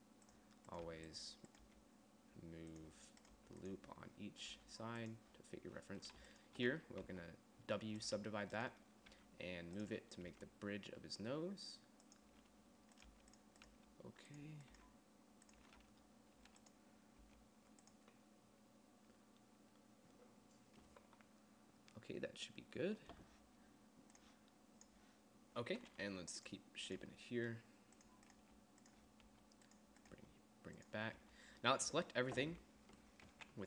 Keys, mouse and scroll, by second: 1.1 g, 2.0 g, 3.6 g, 4.8 g, 7.3 w, 9.5 g, 10.5 g, 13.3 g, 14.0 g, 15.0 g, 17.5 g, 26.5 g, 27.5 g, 28.9 g, 29.8 g, 30.7 g, 31.7 a.